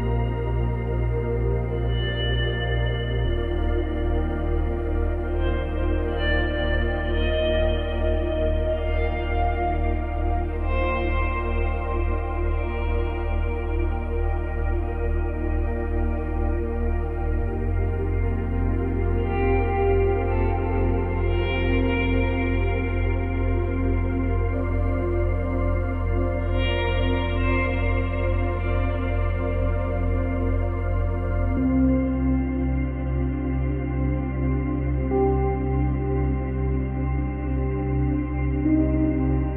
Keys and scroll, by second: 18.3 space, 19.1 space, 23.3 Delete, 24.2 ctrl+z, 27.3 space, 28.6 space, 29.6 space, 31.6 space, 32.9 Delete, 35.0 ctrl+c, 35.5 ctrl+v.